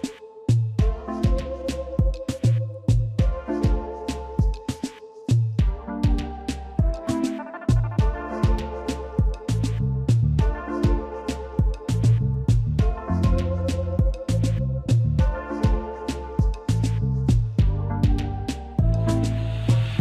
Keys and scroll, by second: 0.1 space, 6.7 ctrl+x, 10.5 ctrl+shift+v.